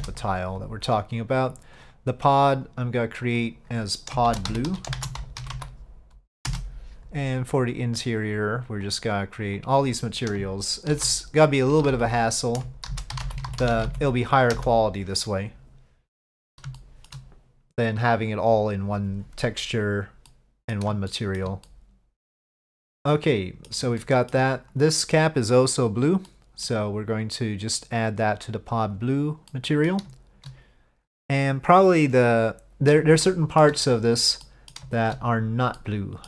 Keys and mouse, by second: 1.9 click, 2.8 click, 3.5-7.3 drag, 7.9 click, 8.9 click, 9.5 click, 9.7-15.8 drag, 16.9 shift+middle drag, 20.4-20.8 middle drag, 21.2 shift+middle drag, 21.7-22.4 middle drag, 23.2-23.7 middle drag, 24.1 shift+middle drag, 26.4-26.8 middle drag, 27.9-29.0 drag, 29.6-30.0 middle drag, 33.4-33.7 shift+middle drag, 34.1 click, 34.5 middle drag, 35.8-36.2 middle drag.